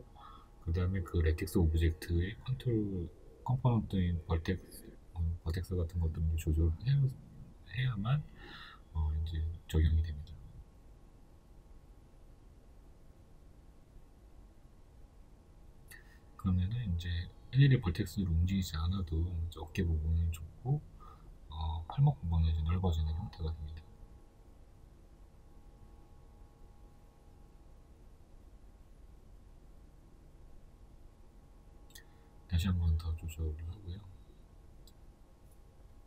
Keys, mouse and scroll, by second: 0.3 KP_3, 1.9 s, 7.7-8.4 scroll up 2, 8.4 Tab, 8.6 right click, 9.2-19.2 shift+middle drag, 9.5-9.9 scroll down 2, 10.2-10.7 scroll up 2, 11.1-12.1 scroll up 2, 12.1-14.3 scroll up 1, 14.3 KP_3, 18.5-19.2 scroll down 2, 19.2 right click, 19.6-28.0 middle drag, 20.0 scroll up 1, 22.0-22.3 scroll down 1, 27.3 Tab, 28.0 right click, 28.5 shift+right click, 28.8 shift+right click, 29.2 middle click, 29.8 shift+right click, 30.2-36.0 middle drag, 30.7 s.